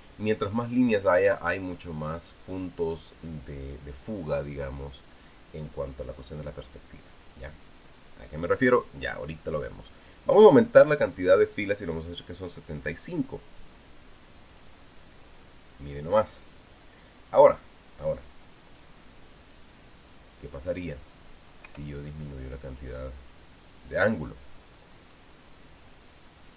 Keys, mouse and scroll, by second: 14.0 click, 15.3 click, 18.1-19.8 drag, 20.8 click, 22.4 BackSpace, 25.6 click.